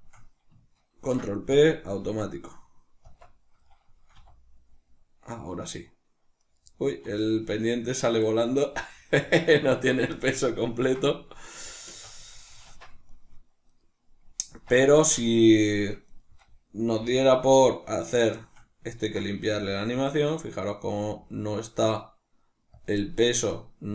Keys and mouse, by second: 0.8 ctrl+p, 2.4 right click, 2.9 Tab, 3.6-6.4 middle drag, 4.1 r, 6.4 right click, 6.9-9.9 middle drag, 6.9 r, 9.9 right click, 10.1-13.0 shift+middle drag, 11.9 a, 13.0 right click, 13.6 right click, 14.4 Tab, 14.9-15.3 shift+middle drag, 15.3 right click, 16.0 right click, 16.4-18.1 middle drag, 16.8 g, 18.1 right click, 18.3-22.7 shift+middle drag, 19.3 g, 22.7 click.